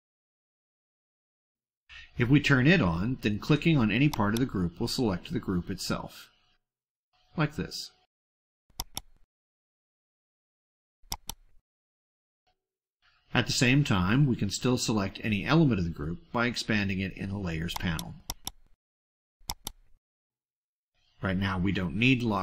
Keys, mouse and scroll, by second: 2.7 click, 4.1 click, 6.5 click, 7.4 middle click, 8.5 click, 10.8 click, 11.9 click, 12.6 click, 14.9 click, 16.1 click, 17.7 click, 18.2 click, 19.5 click, 20.7 click, 21.7-22.4 drag.